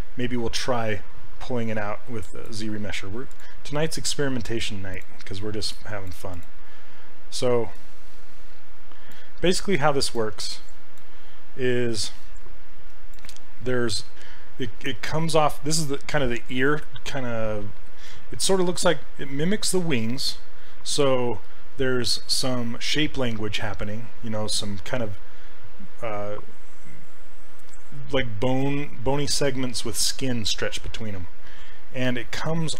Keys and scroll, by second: 10.5 ctrl+z.